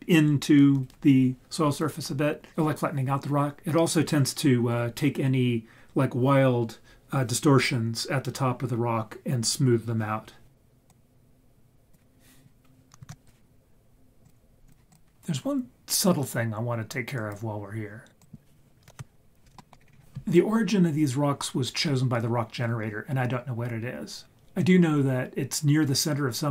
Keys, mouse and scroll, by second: 10.9-11.9 drag, 13.1 ctrl+s, 18.2 click, 18.9 KP_1, 19.1 scroll down 1, 19.7 shift+middle click, 19.9 scroll up 6.